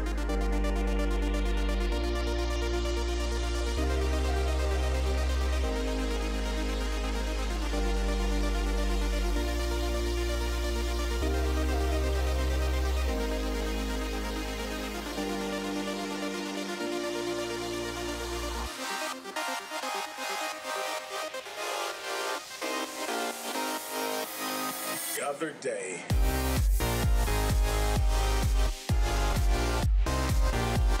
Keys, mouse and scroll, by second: 8.2 KP_7, 9.6 KP_5, 11.0 z, 12.2 g, 16.8 KP_3, 23.1-24.7 drag, 24.7 middle click, 27.6-31.0 drag.